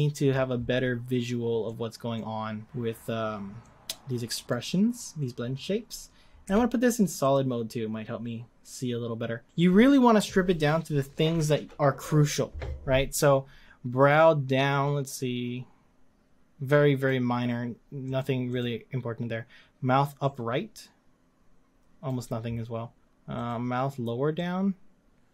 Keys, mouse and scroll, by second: 7.3 z, 9.4-25.3 drag.